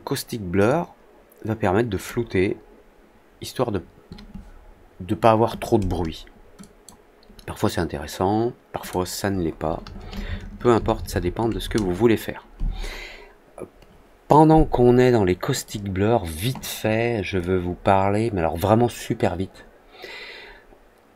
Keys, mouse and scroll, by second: 0.6-2.0 drag, 6.5 click, 8.7 click, 15.6 click, 17.3-21.1 drag.